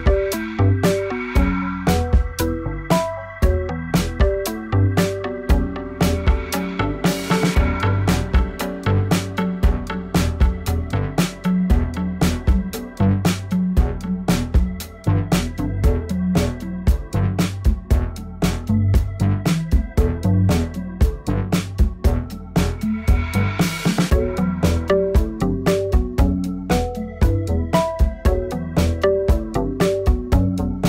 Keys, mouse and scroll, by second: 0.0 y, 0.6 g, 1.8 click, 2.4 l, 2.6-4.0 scroll down 3, 4.0 Delete, 4.8 click, 4.9 Delete, 5.4-5.8 scroll up 2, 5.8 shift+middle drag, 6.0-6.4 scroll up 2, 6.4 shift+middle drag, 6.7-7.2 scroll up 1, 7.2-7.8 scroll up 3, 7.8-8.4 shift+middle drag, 8.4 2, 8.5 click, 9.3 g, 10.7 r, 11.9 r, 12.9 g, 13.6-14.0 scroll down 4, 14.0 shift+middle click, 14.2 scroll up 2, 14.4 g, 15.2 1, 15.4 click, 15.6 g, 16.5 g, 17.5-17.8 shift+middle drag, 17.8-18.4 scroll down 1, 18.4-18.8 scroll up 1, 18.8 k, 21.3 k, 25.5 k, 28.1 k, 30.1 scroll down 1, 30.3-30.8 scroll up 2.